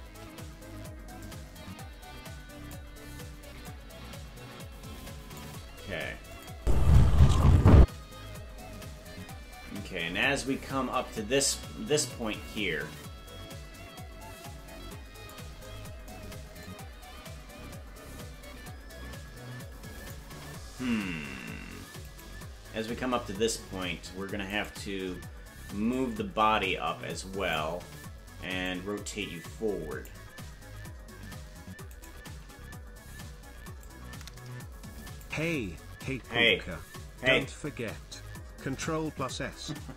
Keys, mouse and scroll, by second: 1.1-2.7 drag, 3.6-5.4 drag, 6.3 click, 6.5 space, 10.4-15.3 drag, 16.6-20.1 drag, 22.3 right click, 24.8 right click, 25.9-27.5 drag, 28.6-30.0 drag, 32.0 shift+right click, 33.8-35.2 drag.